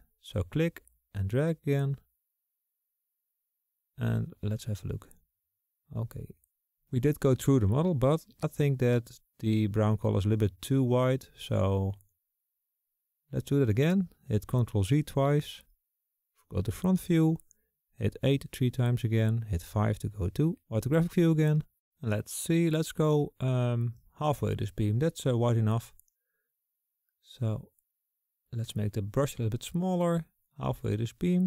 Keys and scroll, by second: 13.5 ctrl+z, 15.5 KP_1, 17.6 KP_8, 18.0 KP_8, 18.3 KP_8, 19.3 KP_8, 27.5 [, 29.9 [.